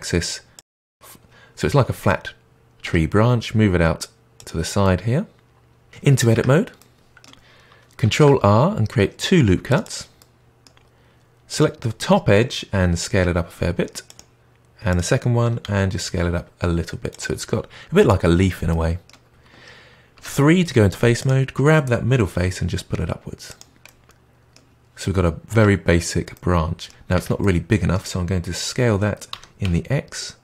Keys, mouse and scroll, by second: 0.9-2.5 middle drag, 2.7 g, 4.7-5.9 middle drag, 6.3 Tab, 6.7-8.0 middle drag, 8.0 ctrl+r, 10.1-11.4 middle drag, 11.4 click, 12.7 s, 14.8 click, 15.5 s, 18.6-20.1 middle drag, 20.1 3, 21.1 click, 22.3 g, 23.8-25.8 middle drag, 25.8-26.3 scroll down 1, 26.3 middle click, 27.1 Tab, 27.3-29.2 middle drag, 29.2 s.